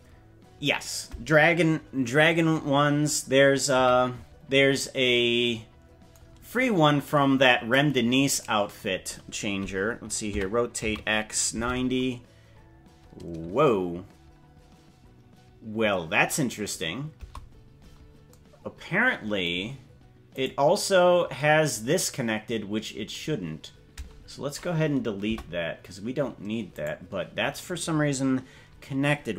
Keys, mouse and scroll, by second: 3.8 KP_Decimal, 4.4-4.8 scroll down 4, 7.0 click, 8.0-8.4 scroll down 2, 10.3 r, 20.4 right click, 25.4 Delete, 26.8 right click.